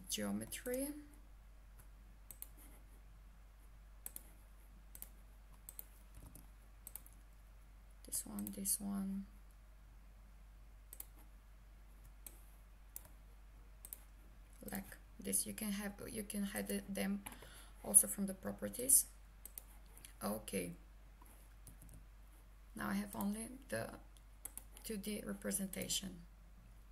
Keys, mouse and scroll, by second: 0.7 ctrl+click, 2.3 click, 6.1 h, 6.9 click, 8.4 ctrl+click, 10.9 ctrl+click, 12.3 click, 13.9 ctrl+click, 14.7 ctrl+click, 16.6 click, 18.8 click, 21.7 h, 23.1 click, 24.5 click.